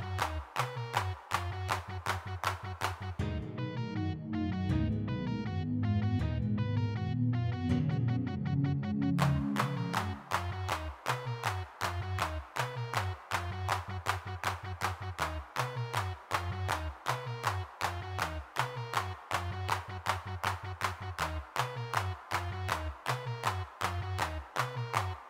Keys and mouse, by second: 0.5 click, 3.0 g, 3.0 f, 3.4 click, 4.4 click, 4.6 middle click, 6.5-8.9 drag, 8.9 middle click, 9.4-10.5 drag, 10.8 middle click, 11.9 3, 12.1 f, 12.4 middle click, 12.6 click, 13.4 click, 13.4-14.5 middle drag, 14.5 click, 14.9 s, 15.1 shift+f, 16.2 3, 16.6 f, 17.5 click, 18.2 middle click, 19.6-24.4 middle drag, 24.8 middle click.